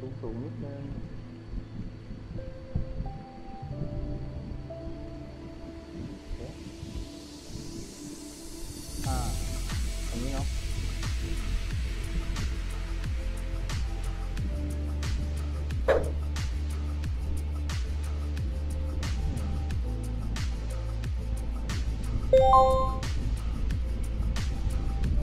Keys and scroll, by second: 0.0 w, 2.3 a, 3.3 w, 4.1 a, 7.8 a, 8.7 w, 12.9 w, 18.7-21.2 typing, 24.4 d.